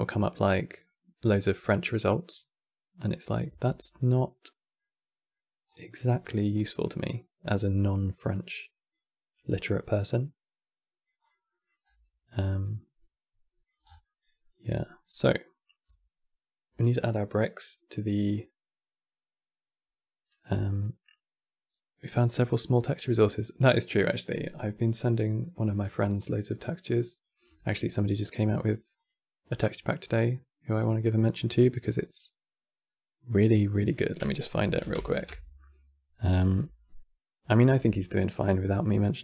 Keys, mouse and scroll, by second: 4.5 middle click, 5.4 scroll down 3, 5.7-8.0 middle drag, 8.0-9.3 drag, 10.9 click, 11.2-11.5 middle drag, 11.5-12.0 scroll up 7, 12.1 click, 13.5 scroll down 7, 13.7-17.9 middle drag, 24.9-25.5 middle drag, 25.5-26.4 scroll up 5.